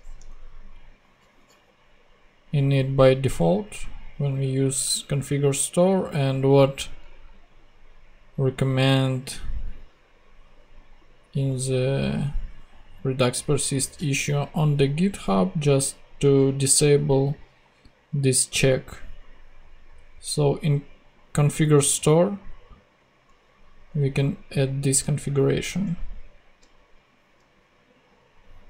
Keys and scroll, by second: 0.2 super+Return, 0.9 Return, 25.2 super+c, 25.6 super+Tab.